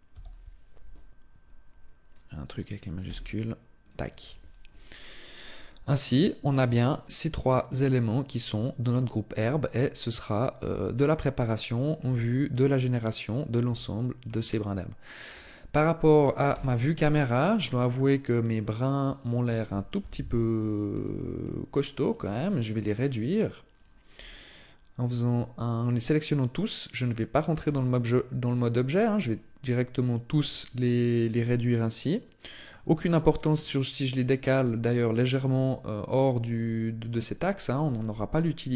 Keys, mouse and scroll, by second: 5.8 right click, 6.6 right click, 8.7 right click, 9.9 click, 11.7 scroll down 5, 12.4-13.4 scroll up 1, 13.4-13.8 scroll down 1, 13.8-14.4 scroll down 1, 14.4 scroll up 1, 15.1-15.4 scroll down 1, 16.0 middle click, 16.5 KP_0, 18.1 right click, 18.5 right click, 18.8 right click, 19.7 KP_7, 20.6-21.2 scroll up 5, 21.7 scroll up 1, 21.8 right click, 22.4 shift+right click, 23.1 right click, 23.7 shift+right click, 27.4 s, 32.4 click, 32.7-34.0 scroll down 2, 34.3 scroll down 2, 37.6 g.